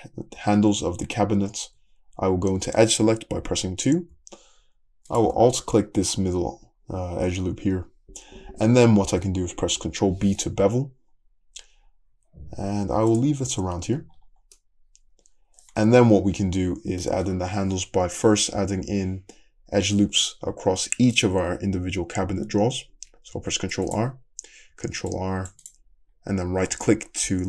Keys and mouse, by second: 0.4 Tab, 1.7 2, 5.1 alt+drag, 5.3-9.2 middle drag, 9.9 ctrl+b, 13.4 Tab, 13.9 Tab, 15.1-16.9 middle drag, 15.9 `, 17.2 middle click, 18.3 middle click, 19.0-23.1 middle drag, 23.4 ctrl+r, 23.6 middle click, 24.7 ctrl+r, 25.0-27.4 middle drag.